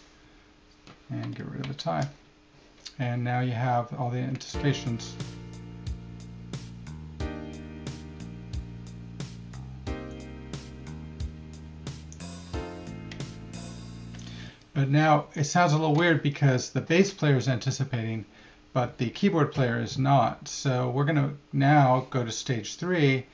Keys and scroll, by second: 2.7 t.